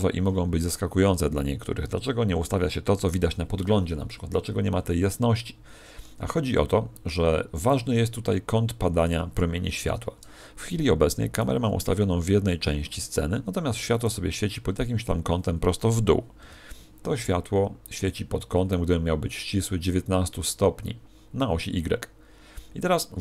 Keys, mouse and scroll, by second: 9.1 Escape, 11.3 right click, 13.9 right click, 16.3 n, 17.9 click.